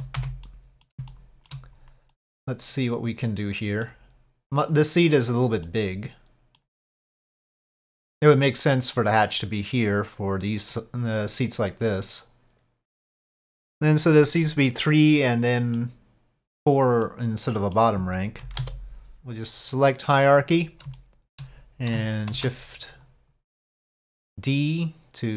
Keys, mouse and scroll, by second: 0.4-0.8 middle drag, 1.1-1.5 shift+middle drag, 2.1-3.8 middle drag, 4.7 click, 5.6-6.7 middle drag, 7.3-8.3 middle drag, 8.9-10.8 middle drag, 11.5-13.0 drag, 14.4-15.8 middle drag, 17.1-17.8 middle drag, 18.4 KP_5, 18.6 KP_7, 19.3-20.4 drag, 19.3 ctrl+z, 20.9-21.3 shift+drag, 22.3 shift+d, 24.3-25.3 drag.